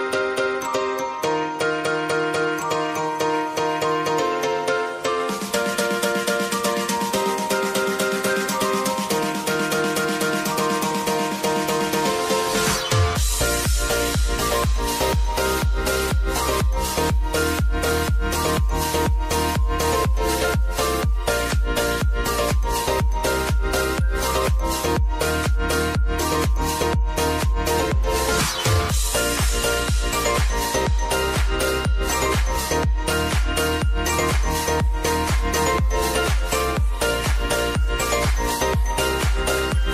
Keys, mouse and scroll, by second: 4.0 click, 4.7 ctrl+a, 5.7 ctrl+alt+Home, 7.1 s, 7.8 click, 8.6 Return, 8.8 click, 11.3 Return, 11.6-23.2 drag, 26.2 ctrl+d, 26.9 click, 29.9 Return, 30.7-32.6 drag, 33.5 Return, 34.9-36.2 drag, 36.2 scroll up 1, 37.4 click, 39.2 v.